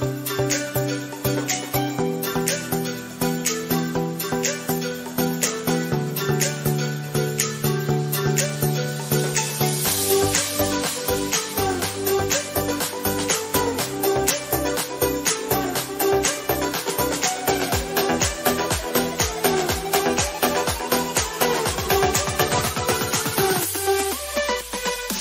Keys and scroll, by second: 0.5 ctrl+z.